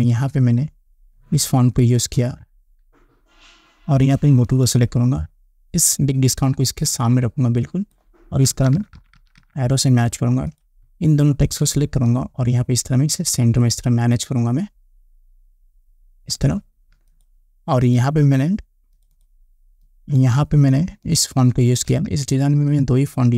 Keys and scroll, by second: 9.0 Up.